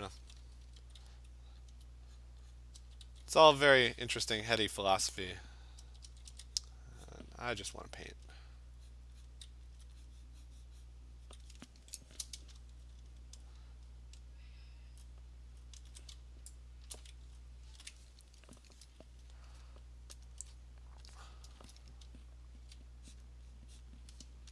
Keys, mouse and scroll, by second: 0.0-0.7 typing, 1.8 alt+click, 2.2 click, 2.6 click, 2.8 alt+click, 2.8 [, 3.0 [, 3.4 click, 3.7 click, 4.0 click, 4.1 alt+click, 4.8 alt+click, 5.5 click, 5.8 click, 5.8 [, 6.1 [, 6.3 [, 6.8 click, 7.1 click, 8.3 alt+click, 9.0 click, 9.3 click, 9.8 alt+click, 11.5 click, 12.3-12.9 scroll, 13.1-14.3 scroll, 15.0-15.7 scroll, 16.6-17.5 scroll, 17.0 click, 20.3 alt+click, 21.4 click, 22.1-22.7 ], 23.2 click, 23.8 click.